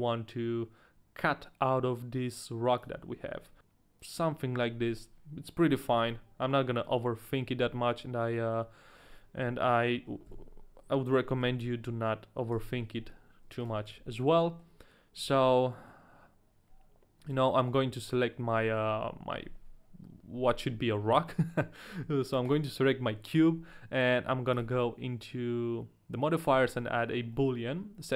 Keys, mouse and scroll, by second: 2.8 click, 3.1 r, 3.6 click, 3.6 s, 3.6 z, 3.6 g, 4.0 click, 6.2 middle click, 6.8 middle click, 7.7 middle click, 9.4 KP_3, 10.8 KP_3, 11.8 ctrl+KP_1, 11.8 KP_3, 12.5 KP_1, 13.5 a, 13.6 right click, 14.0 ctrl+KP_1, 14.0 right click, 14.0 a, 14.4 middle click, 15.4 ctrl+z, 15.4 right click, 15.4 middle click, 15.4 a, 15.7 middle click, 17.3 right click, 17.8 scroll up 2, 18.1 middle click, 18.4-20.3 scroll down 2, 18.8 right click, 18.8 shift+middle click, 21.2 middle click, 21.9 right click, 22.1 a, 22.4 right click, 24.5 click, 26.8 middle click, 27.3 middle click.